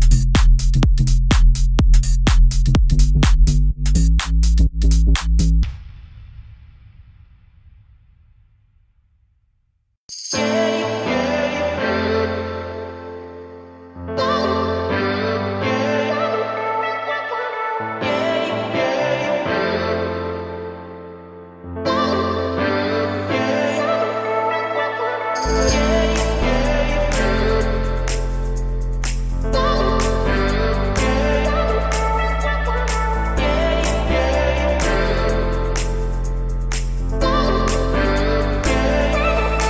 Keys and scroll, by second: 5.4 Escape, 11.9 Escape, 13.0 Escape, 18.1 Escape, 20.6 Escape, 24.6 Escape, 29.2 0, 30.7 Escape, 33.9 Escape.